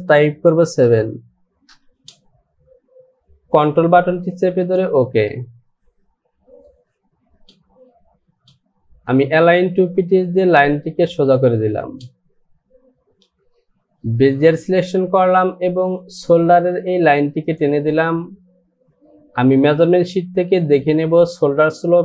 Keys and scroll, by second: 1.0 KP_7, 1.7 Return.